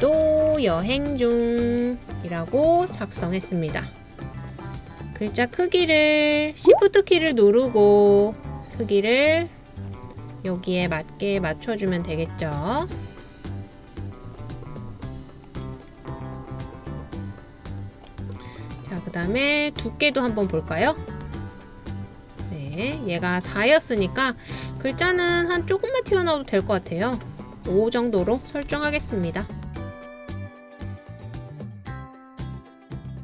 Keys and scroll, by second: 0.0-2.4 typing, 4.6-6.9 typing, 28.7 5, 29.0 Return.